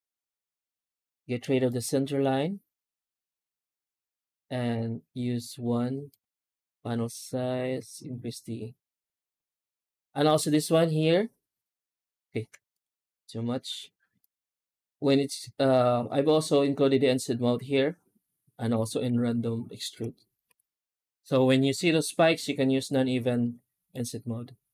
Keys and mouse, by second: 0.3 F9, 18.8 shift+q, 20.3 F9.